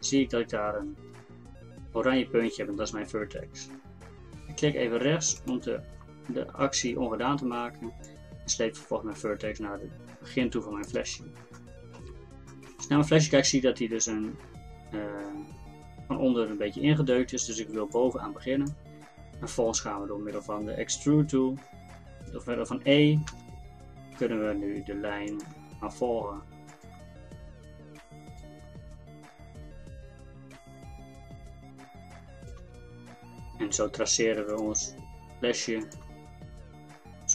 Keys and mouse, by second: 8.1-10.9 drag, 11.5 middle click, 12.1-23.4 drag, 23.4 e, 25.5 e, 27.0 e, 28.7 e, 32.6 e, 34.8 e, 36.1 e.